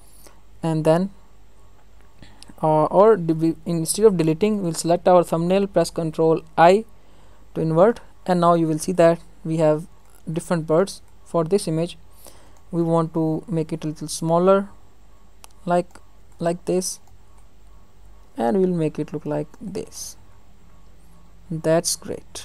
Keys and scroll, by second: 3.6 ctrl+alt+z, 6.5 ctrl+i, 12.8 ctrl+g, 13.7 ctrl+t.